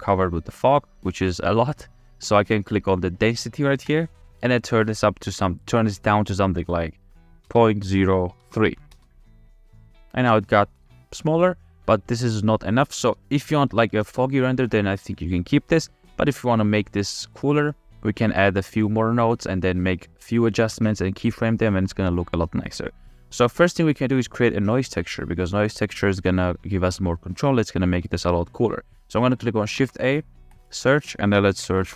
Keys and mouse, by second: 0.8-2.3 drag, 3.9-9.4 drag, 11.5 click, 13.2 space, 14.0 space, 18.3 middle click, 23.8 middle click, 27.7-28.3 middle drag, 29.8 shift+a.